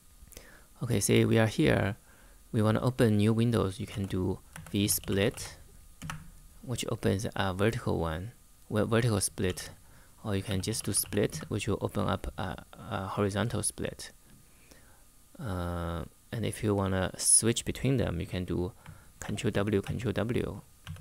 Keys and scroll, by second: 3.6-5.5 typing, 5.7 Return, 9.2-11.2 typing, 17.9 Escape, 19.0 ctrl+w, 19.2 ctrl+w, 19.5 ctrl+w, 20.6 ctrl+w, 20.8 ctrl+w.